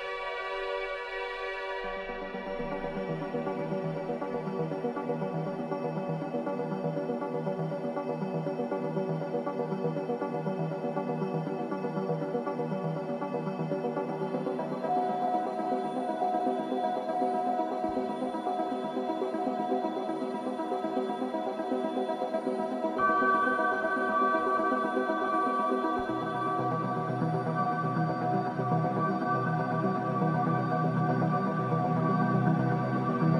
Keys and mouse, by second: 0.0-0.4 typing, 0.8 click, 1.1-1.7 drag, 2.4-4.9 alt+drag, 5.3 0, 6.6-7.6 drag, 7.6 ctrl+s, 8.0 alt+a, 8.6-10.8 ctrl+alt+drag, 12.9-13.3 drag, 13.5 click, 15.2-15.8 alt+shift+drag, 17.7 click, 18.9 shift+click, 19.9-20.6 shift+drag, 21.6-24.8 drag, 29.5-30.1 shift+drag, 31.0 i, 31.7 click.